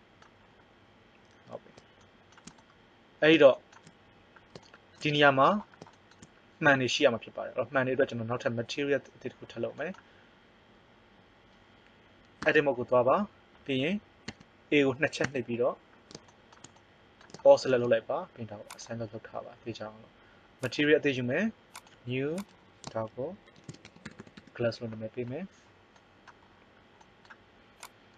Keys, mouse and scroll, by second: 12.4 Tab, 14.2 a, 15.2 a, 18.7 click, 24.1 s, 27.8 right click.